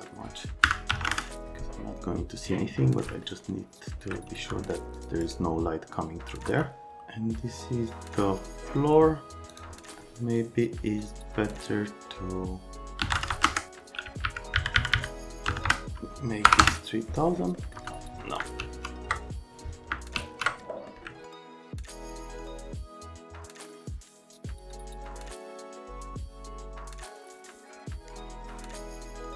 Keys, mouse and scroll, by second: 0.6 KP_Subtract, 0.9 KP_2, 1.0 KP_0, 1.1 KP_Enter, 2.4 click, 3.2 alt+middle click, 4.4 c, 5.0 middle click, 5.2 right click, 6.5 F3, 6.8 alt+middle click, 9.5 click, 13.0 KP_3, 13.1 KP_0, 13.3 KP_0, 13.4 KP_Enter, 14.2 Left, 14.6 Right, 14.8 Right, 14.9 Right, 15.5 KP_0, 15.7 KP_0, 16.5 BackSpace, 16.6 KP_Enter, 17.6 middle click, 17.8 F3, 17.9 middle click, 18.6 ctrl+z, 20.2 ctrl+z, 20.7 middle click, 21.1 alt+middle click, 21.9 ctrl+click, 22.3 ctrl+click, 22.5 alt+middle click, 22.8 click, 22.9 F3, 23.0 alt+middle click, 23.2 right click, 23.3 right click, 23.7 shift+middle click, 24.4 click, 24.6 middle click, 24.8 alt+q, 25.2 click, 25.4 middle click, 25.6 click, 25.8 Delete, 26.1 click, 26.3 click, 26.5 Delete, 26.6 click, 26.8-27.2 scroll, 26.9 click, 27.1 ctrl+a, 27.4 click, 27.4 middle click, 27.7 middle click, 27.9-28.4 scroll, 28.1 middle click, 28.1 right click, 28.6 F3.